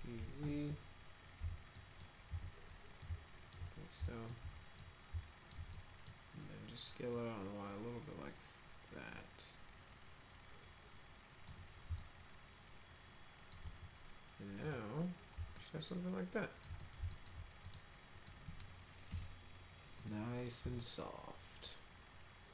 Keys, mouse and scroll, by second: 1.4 z, 1.7 middle click, 2.3 z, 3.0 alt+middle click, 4.0 alt+middle click, 4.7 middle click, 5.7 middle click, 7.1-11.4 drag, 12.0-13.5 alt+middle drag, 15.6-16.6 alt+middle drag, 16.8 middle click, 17.1 alt+middle click, 17.6 click, 18.2 middle click, 19.1 F4, 20.0 middle click, 20.8-22.5 alt+middle drag.